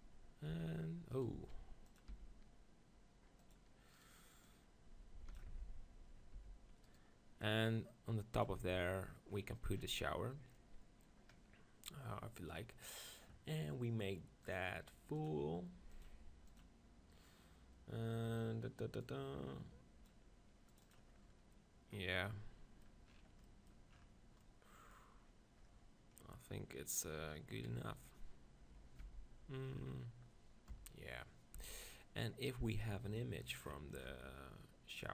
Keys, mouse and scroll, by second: 0.7 r, 1.1 middle click, 1.3 e, 2.2 r, 3.5-6.2 drag, 4.0-6.1 right drag, 5.5 Tab, 6.2-7.6 middle drag, 6.3 Tab, 6.8-8.7 right drag, 7.4-9.1 drag, 8.6 Tab, 9.3-10.9 middle drag, 16.6-22.8 drag, 22.3 middle click, 27.6 KP_3, 29.0 Tab, 30.7 KP_1, 31.6 Tab, 35.0 click.